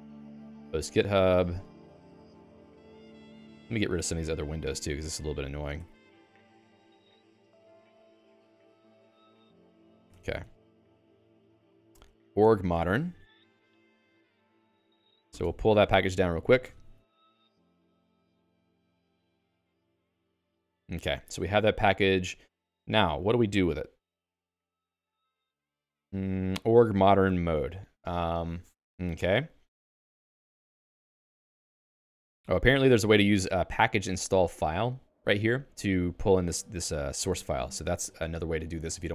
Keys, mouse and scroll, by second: 9.6-14.1 typing, 10.1 Escape, 17.9 ctrl+alt+x, 21.1 Escape, 21.8 j, 38.9 j.